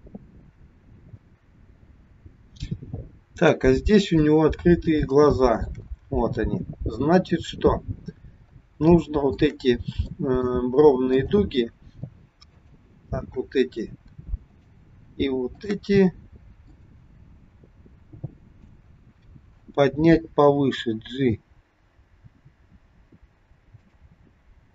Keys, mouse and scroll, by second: 4.2-5.0 scroll up 3, 5.2 shift+middle click, 7.2 click, 8.3-8.9 scroll up 2, 9.0 shift+middle click, 10.2 middle click, 11.3 click, 12.6 shift+click, 16.8 middle click, 18.9-19.8 scroll down 1, 20.6 g.